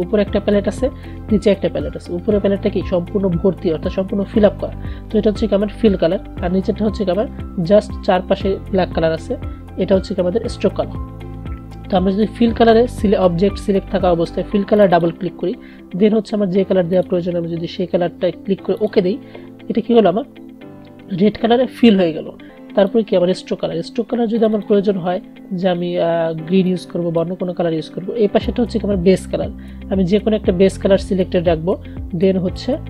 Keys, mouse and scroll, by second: 14.9 click, 22.9-32.8 drag.